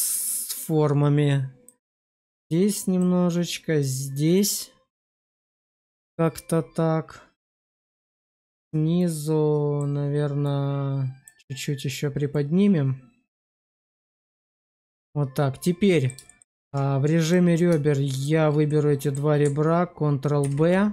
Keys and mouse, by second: 2.4 click, 3.7 click, 8.9 click, 10.4 click, 12.4 click, 15.5 middle click, 16.2 shift+middle click, 16.5 Tab, 17.1 click, 18.0 shift+click, 18.6 middle click, 20.3 ctrl+b.